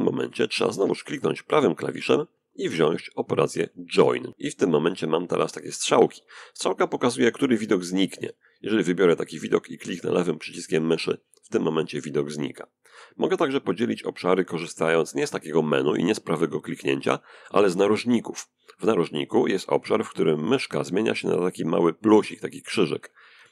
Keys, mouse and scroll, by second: 1.0 right click, 10.4 click.